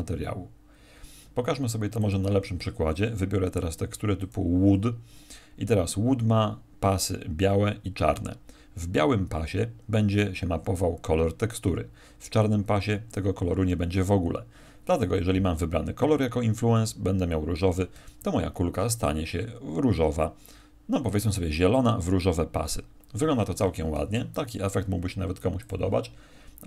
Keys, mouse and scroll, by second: 24.5 Escape, 25.5 click.